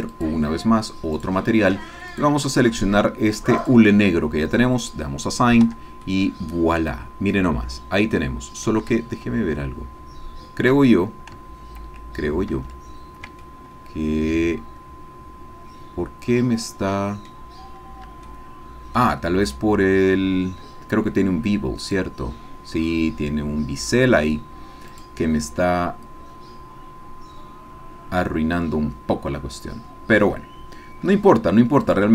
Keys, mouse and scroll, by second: 0.1 click, 1.1 click, 2.1 click, 3.6 click, 4.8 click, 5.8 Tab, 6.1-7.6 middle drag, 8.1 middle click, 9.2 ctrl+z, 12.5 ctrl+z, 13.4-17.4 ctrl+drag, 17.6-18.1 scroll up 1, 18.3 shift+click, 19.1 shift+middle click, 21.9 click, 24.9 click, 31.8 click.